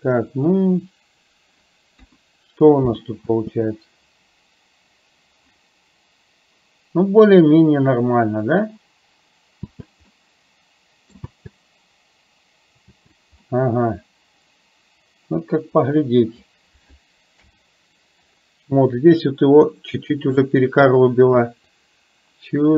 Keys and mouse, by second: 2.1 KP_1, 3.3 space, 9.7 space, 10.2 middle click, 11.2 space, 13.5-16.5 middle drag, 17.5 KP_7, 21.8-22.7 drag.